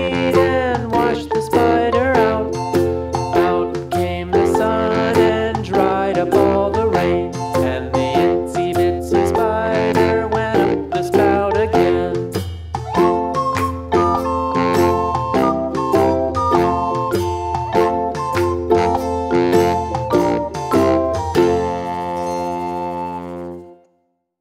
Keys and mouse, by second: 0.9-1.3 drag, 10.1 ctrl+z, 10.7-13.1 drag, 18.2 space, 18.3 click, 19.2 Left, 20.2 click.